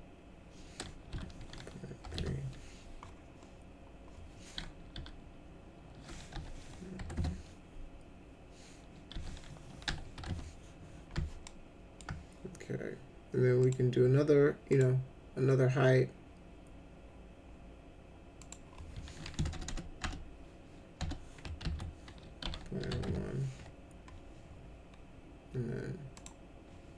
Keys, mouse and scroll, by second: 1.1 ., 2.0 3, 4.9 ., 6.3 0, 6.9 3, 9.1 ., 9.8 0, 10.1 1, 11.4 alt+middle click, 13.6 click, 14.7 click, 18.4 click, 19.3-20.9 typing, 21.6 ctrl+a, 22.1-23.4 typing, 26.1 click.